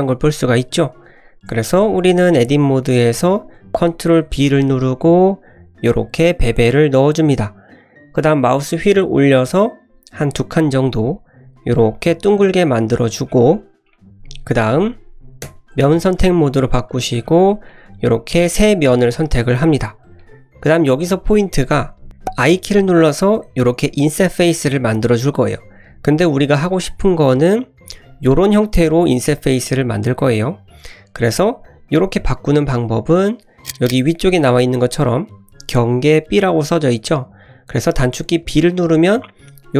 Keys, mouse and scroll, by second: 0.8-1.1 middle drag, 1.3-1.6 scroll up 1, 1.7 shift+middle drag, 2.1 middle click, 4.2 ctrl+b, 13.2-13.8 scroll up 1, 13.8-14.4 middle drag, 15.0 middle click, 15.4 3, 17.0 click, 17.6 shift+click, 18.1 shift+click, 18.5-19.7 middle drag, 20.1 middle click.